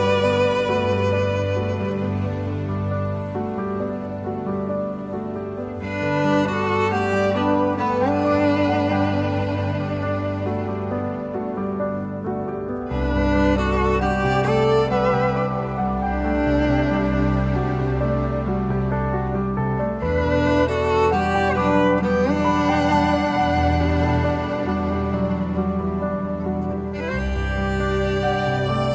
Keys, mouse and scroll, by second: 0.7 shift+a, 3.6 shift+middle click, 9.8 scroll up 1, 10.1 shift+a, 15.5 m, 16.2 m, 17.4 shift+a, 22.8 scroll down 1, 23.2 shift+d, 23.4 middle click, 23.5-23.8 scroll, 24.0 middle click, 24.6 scroll up 1, 24.8 middle click, 25.1 ctrl+z, 25.4 ctrl+z, 27.5 scroll down 1, 27.6 middle click, 28.4 middle click, 28.5 scroll up 1, 28.5 scroll down 1.